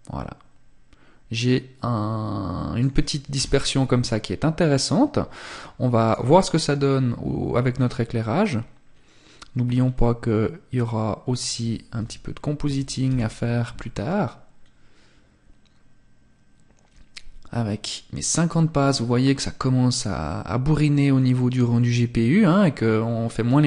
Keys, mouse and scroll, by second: 2.3 KP_0, 4.4 click, 8.9 scroll up 1.